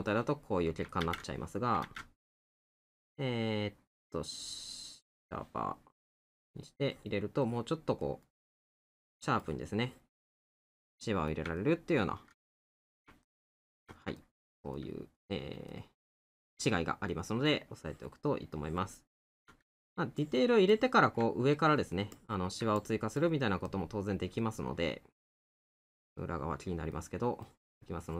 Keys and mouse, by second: 5.8 middle click, 8.0 middle click, 10.9 middle click, 23.9 middle click.